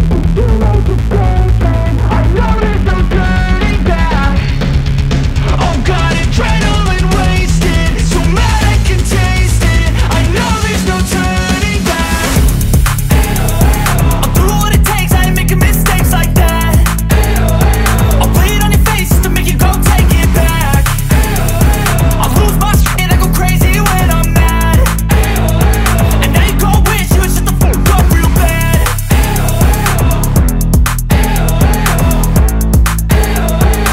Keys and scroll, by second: 0.6 b, 1.4 ], 4.0 x, 6.3 [, 7.3 [, 8.3 [, 9.1 [, 9.6 ], 11.0 [, 11.9 space, 13.0-16.8 typing, 20.2 x, 21.3 z, 26.4 alt+shift+Return.